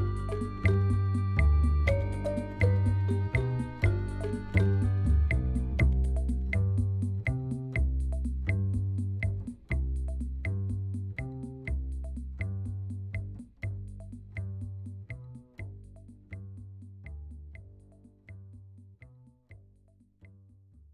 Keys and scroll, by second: 0.6 i, 5.4 e, 7.4 ctrl+b.